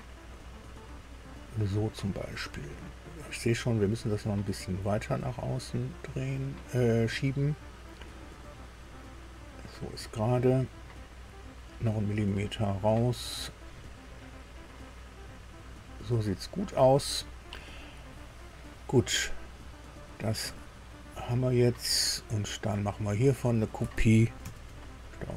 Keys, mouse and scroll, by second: 8.6-9.8 drag, 10.4-12.5 drag, 13.5-16.4 drag, 16.8-17.1 scroll down 2, 19.9 click, 20.9-21.9 middle drag, 21.9-23.3 drag, 24.4 ctrl+c.